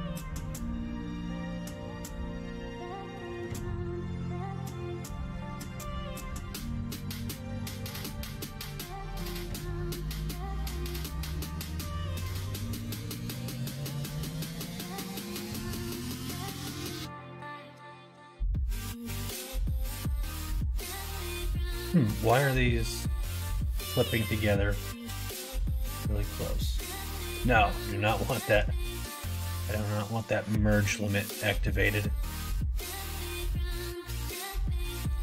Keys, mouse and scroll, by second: 0.6 middle click, 3.5 middle click, 3.9 middle click, 4.3 ctrl+z, 4.5 ctrl+z, 4.8 ctrl+z, 5.0 ctrl+z, 5.2 ctrl+z, 5.4 ctrl+z, 5.5 ctrl+z, 6.2 middle click, 6.9 click, 7.8 click, 8.1 middle click, 8.6 middle click, 10.8-21.7 middle drag, 22.8 middle click, 24.2 middle click, 27.0 click, 27.5 middle click, 28.1 middle click, 29.9 middle click, 30.4 middle click, 32.9 middle click.